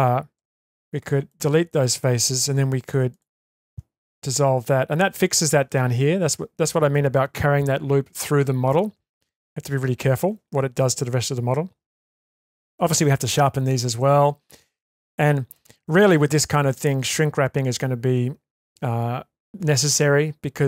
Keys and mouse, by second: 0.3 Delete, 2.5 2, 3.1 alt+click, 4.0 ctrl+x, 4.6 Tab, 12.3 Tab, 15.5-16.0 shift+middle drag.